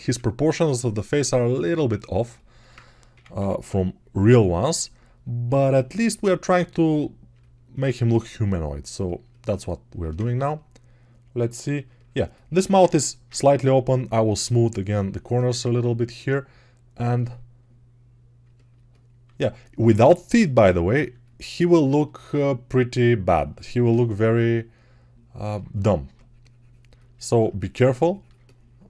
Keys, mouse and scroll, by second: 3.2 ], 7.9 g, 19.1 alt+q, 19.8 g.